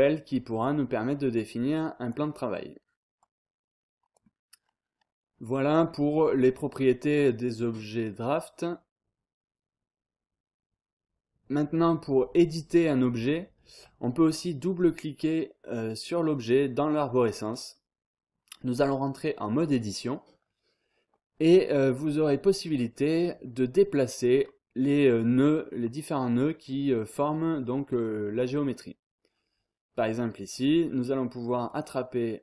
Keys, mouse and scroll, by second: 1.3 click, 2.3 scroll down 2, 2.4-3.0 scroll up 1, 3.2-4.6 drag, 5.8 scroll down 1, 6.1-6.7 scroll up 1, 13.0-13.6 scroll up 1, 14.3 click, 17.3 click, 20.4 scroll down 1, 20.5-21.2 scroll up 1, 27.5 scroll down 1, 27.7-28.3 scroll up 1, 31.7 click.